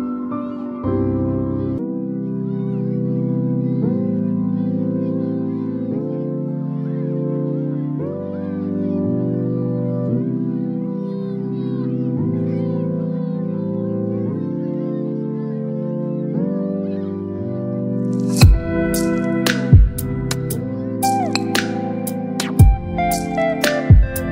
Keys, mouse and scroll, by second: 3.8 click, 4.0 click, 5.9 alt+BackSpace, 8.7 click, 9.5 x, 11.0 alt+BackSpace, 12.2 ctrl+d, 15.1 click, 20.0 click.